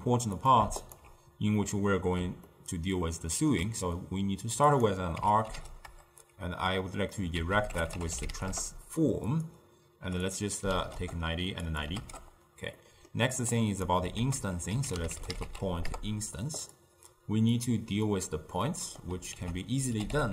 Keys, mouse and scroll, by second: 0.9 alt+shift+click, 1.7-2.3 middle drag, 2.3 ctrl+scroll up 1, 2.6-6.0 ctrl+middle drag, 6.0-8.6 drag, 8.6 ctrl+a, 11.0-16.0 drag, 16.0 ctrl+a, 18.1-20.3 drag.